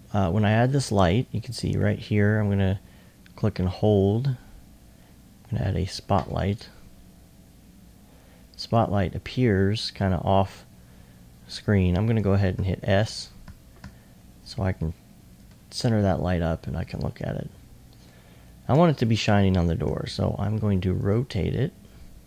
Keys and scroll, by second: 12.6-14.1 typing, 19.8 r.